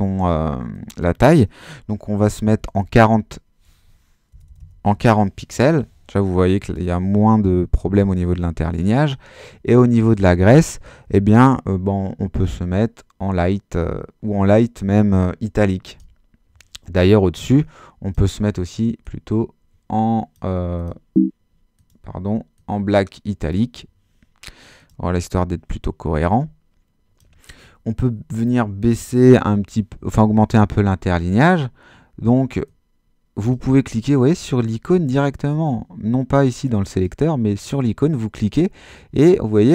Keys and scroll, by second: 2.3-3.2 typing, 4.3-5.4 typing.